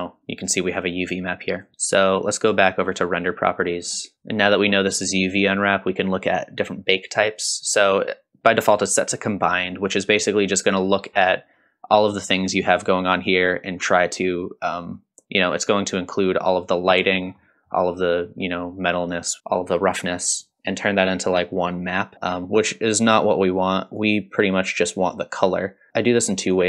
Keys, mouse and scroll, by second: 1.6 click, 1.8-2.5 scroll up 4, 3.2 click, 3.8-5.2 scroll down 4, 15.0-16.0 middle drag, 17.2-17.5 scroll up 2, 17.5 middle drag, 23.9-26.6 drag.